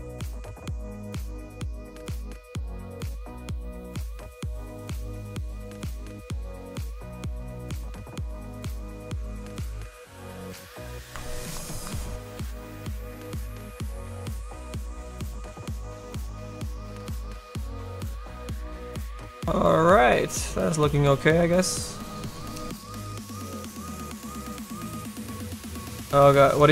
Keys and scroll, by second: 1.2 s.